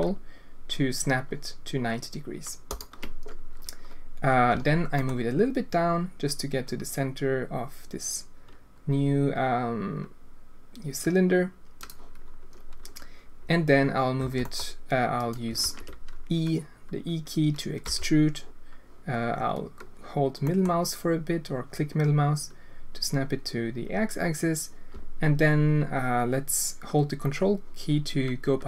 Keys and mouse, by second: 4.5 g, 14.2 e, 15.6 ctrl+z, 17.8 e.